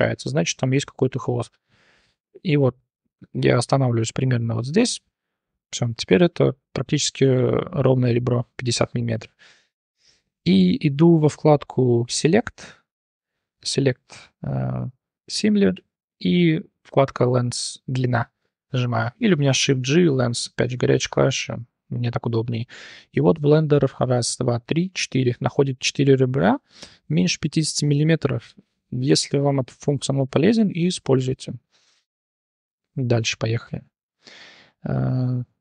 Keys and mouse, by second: 7.4 2, 9.0 click, 9.9 click, 12.1-18.5 drag, 19.5 shift+g, 21.0-21.4 drag, 21.7-22.0 drag, 22.9 click, 25.6 shift+drag, 27.5 click, 28.8 click, 29.8 click, 30.6 2, 30.8 click, 32.7 Tab, 33.0 click, 33.6 h, 34.2-34.7 shift+middle drag, 35.2-35.6 middle drag.